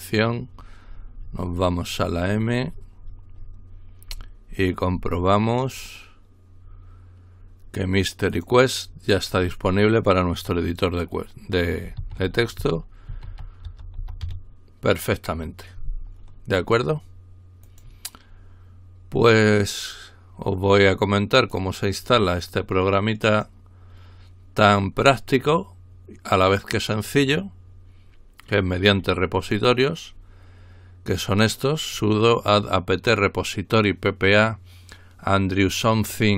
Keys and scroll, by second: 12.0-14.7 typing.